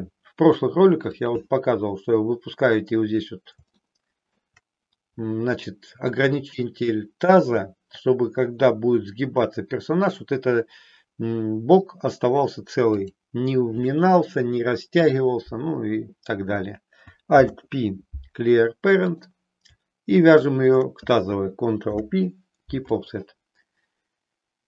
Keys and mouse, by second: 3.8 shift+middle click, 13.1 click, 17.3 alt+p, 20.4 shift+click, 21.8 ctrl+p.